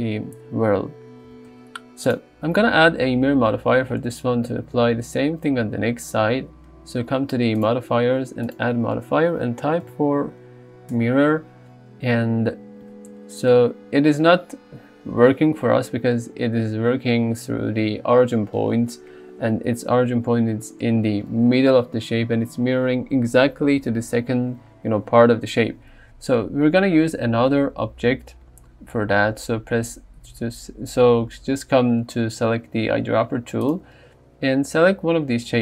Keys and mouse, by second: 1.3 g, 1.5 x, 7.6 click, 8.5 click, 33.7 click.